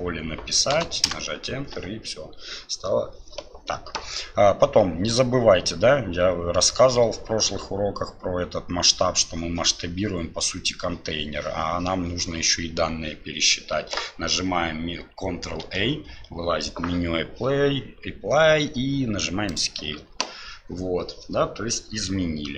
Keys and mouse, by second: 15.6 ctrl+a.